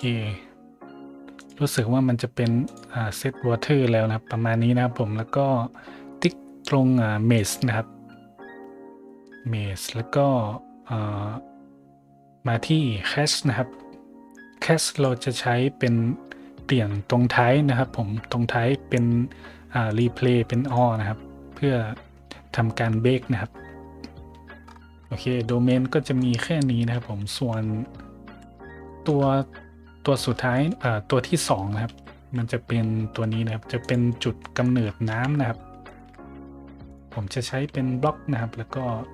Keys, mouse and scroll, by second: 1.3 click, 2.6 click, 3.8 middle click, 7.3 click, 10.0 scroll down 1, 13.2 scroll up 1, 13.6 scroll down 1, 14.8 click, 19.8 click, 20.6 click, 23.5 middle click, 23.6 middle click, 24.9 scroll down 1, 24.9 scroll up 1, 25.4 middle drag, 26.1 drag, 27.3 `, 28.2 a, 28.8 shift+middle drag, 30.0 middle click, 30.5 shift+middle click, 31.8 shift+a, 33.7 click, 34.3 middle drag, 34.8 scroll down 1, 35.0 `, 35.8 shift+middle click, 36.1 g, 36.8 click, 37.1-37.4 scroll down 1, 37.4 middle click, 38.8 s.